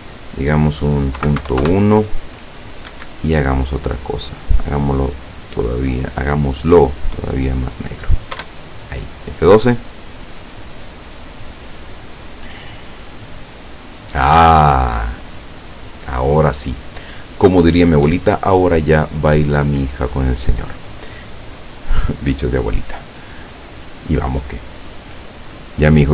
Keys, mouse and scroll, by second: 1.3 KP_Decimal, 1.5 KP_1, 1.7 KP_Enter, 3.0 Escape, 4.3 click, 5.4-7.4 drag, 8.4 F12.